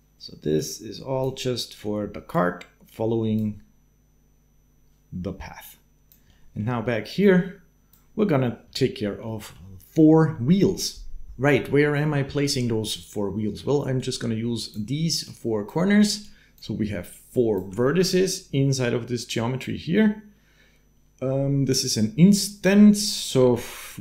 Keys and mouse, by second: 0.0 g, 1.5-2.6 drag, 5.6 click, 6.2 click, 7.2-8.7 drag, 9.2 click, 11.4 shift+click, 13.3-16.9 d, 13.8 click, 15.0 click, 16.0 click, 16.9 click, 17.4 d, 17.8 d, 22.9 click, 23.3 shift+a.